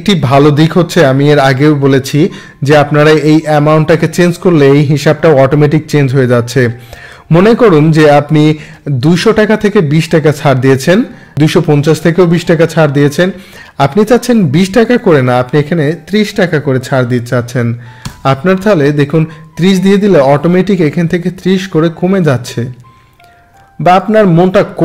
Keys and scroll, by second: 16.4 3, 18.0 Return.